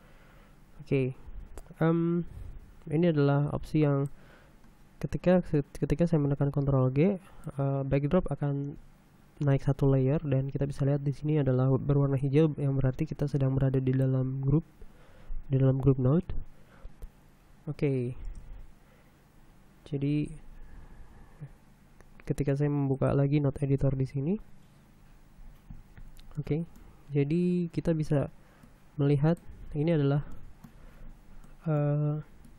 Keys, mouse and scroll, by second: 0.7-1.2 scroll down 2, 1.5-2.2 scroll up 3, 4.2 click, 7.7 click, 13.9-14.8 scroll up 2, 19.0 shift+space, 20.4 middle click, 20.6-21.2 scroll down 1, 23.6 click, 23.7 middle click, 24.6 n, 25.6-27.0 scroll down 2, 27.0 middle click, 29.3 middle click, 30.4-30.9 scroll up 1, 31.0 middle click, 31.1-32.0 scroll up 4, 32.1 middle click.